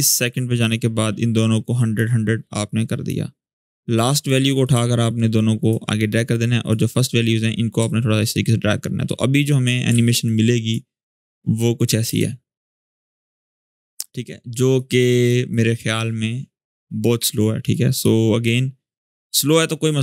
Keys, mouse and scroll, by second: 2.4-3.0 click, 3.4-4.1 click, 4.4-8.8 drag, 8.8-9.4 click, 10.0-10.6 click, 10.7-11.5 scroll down 1, 11.5 click, 11.8 space, 13.8-14.5 click, 14.5-15.1 click, 15.3-17.1 drag.